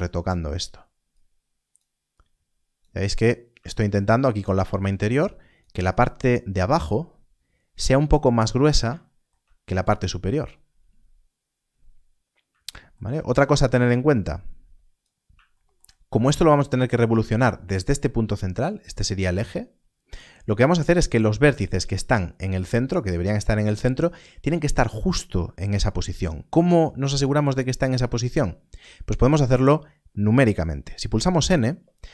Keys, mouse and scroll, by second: 3.1 scroll down 1, 4.7 click, 8.7 click, 13.2 scroll up 1, 14.1 click, 16.0-16.3 scroll up 1, 20.7-21.2 scroll up 1, 21.2 click, 31.2 Left.